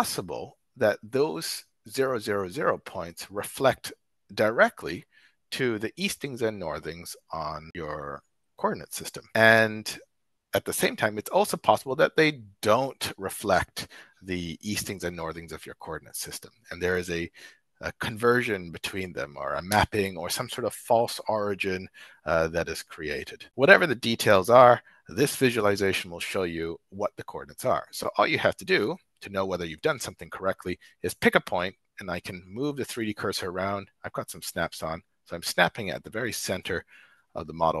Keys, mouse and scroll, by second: 28.8 shift+click, 29.2 shift+right click, 29.3-30.0 shift+drag.